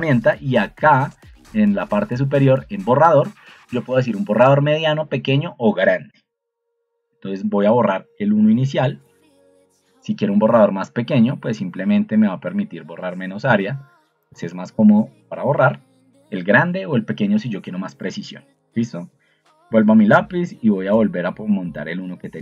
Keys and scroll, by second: 5.9 Escape.